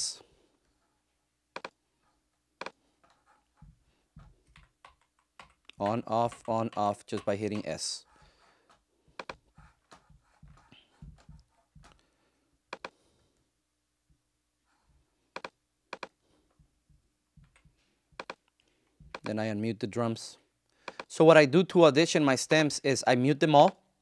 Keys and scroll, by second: 4.7 s, 17.3 s.